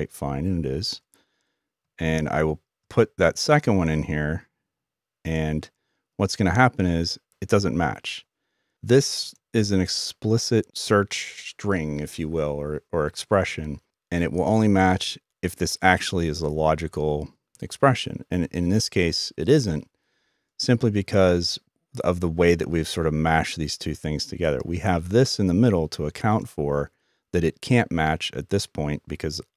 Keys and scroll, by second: 3.3-3.7 typing.